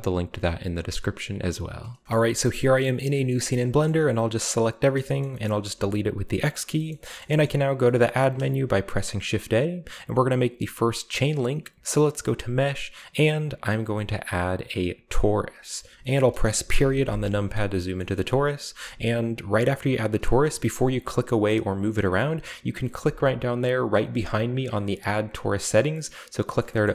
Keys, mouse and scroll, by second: 2.0-3.1 shift+middle drag, 3.3-4.8 middle drag, 3.3 a, 4.1 a, 5.2 middle click, 5.4 middle click, 5.6 x, 6.4-6.9 shift+drag, 6.9-7.4 shift+middle drag, 6.9-8.9 scroll up 1, 7.5-7.9 shift+middle drag, 8.0 shift+middle click, 8.2 a, 15.1 click, 15.6 middle click, 20.1-24.2 scroll down 1, 24.2 click, 26.5 middle drag, 26.8-26.9 shift+middle drag.